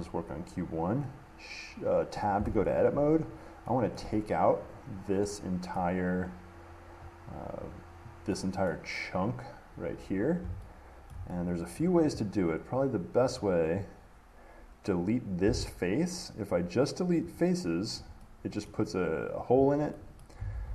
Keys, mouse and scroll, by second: 2.6 Tab, 3.3 click, 4.1 middle click, 5.9 middle click, 8.9 middle click, 11.3 shift+middle click, 12.0 middle click, 13.6 click, 17.6 click, 18.9 middle click, 20.4 middle click.